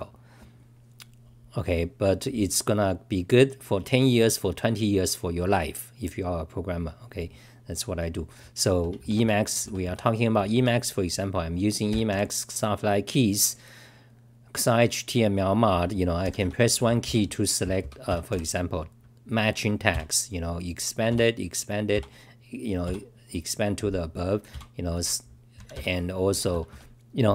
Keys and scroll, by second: 10.3-11.0 typing, 26.0-26.8 typing.